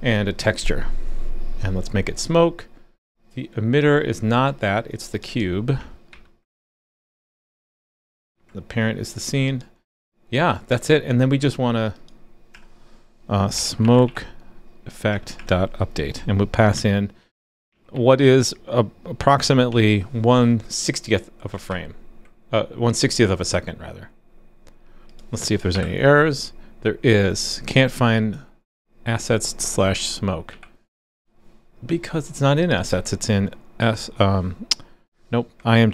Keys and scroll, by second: 6.1 super+c, 8.3 super+v, 21.7 super+s, 25.7 alt+super+j, 30.5 alt+super+j.